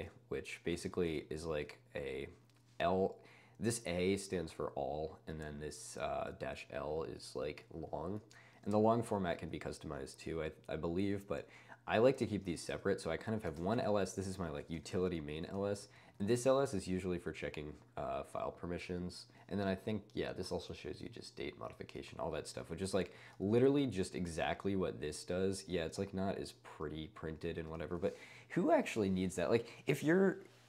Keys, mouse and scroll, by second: 0.0-1.0 typing, 0.8 ctrl+space, 1.2 ctrl+u, 1.3 ctrl+u, 1.4 ctrl+u, 2.0 ctrl+d, 3.6 click, 5.6 click, 6.9 click, 8.1 ↺, 8.8 ctrl+d, 9.1 ctrl+d, 10.1 ctrl+u, 10.5 ctrl+u, 12.4-15.4 typing, 14.7 ctrl+space, 15.6 ctrl+u, 15.7 ctrl+u, 15.8 ctrl+u, 16.0 ctrl+u, 17.5 click, 17.7 click, 17.8 click, 18.2 click, 23.6-24.9 typing, 24.8 click, 27.1 d, 27.9 å.